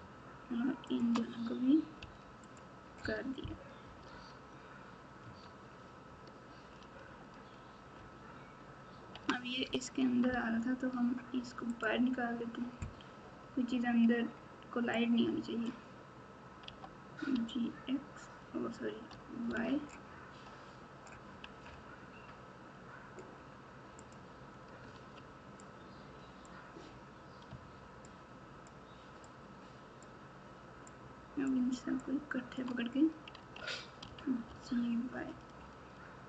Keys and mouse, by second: 0.8 shift+click, 1.9 m, 3.8 KP_4, 4.1 KP_4, 5.2 Tab, 7.9 ctrl+KP_8, 8.4 ctrl+KP_8, 10.0 Tab, 11.7 right click, 14.9 click, 16.6 g, 24.9 alt+z, 25.6 click, 28.1 shift+click, 29.4 shift+click, 31.0 shift+click, 32.1 shift+click, 33.3 alt+z, 34.0 g.